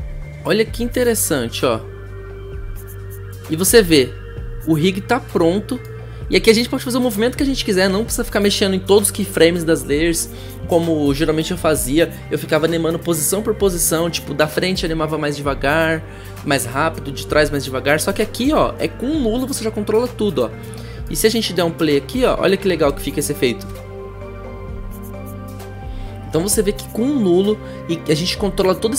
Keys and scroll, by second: 22.6 n, 23.7 0.